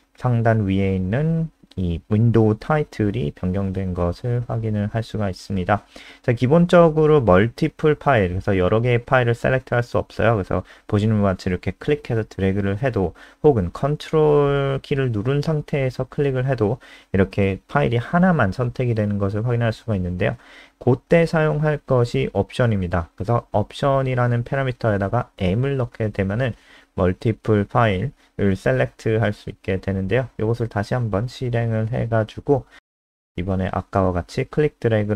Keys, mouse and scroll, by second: 11.7 click, 18.8 ctrl+click, 20.1 click, 26.2 m, 27.1 Escape, 27.7 End, 28.2 ctrl+shift+Left, 28.8 ctrl+shift+Left, 29.2 ctrl+shift+Left, 29.6 shift+Right, 29.8 shift+Right, 30.3 BackSpace, 31.3 click, 32.8 ctrl+s, 33.2 F5.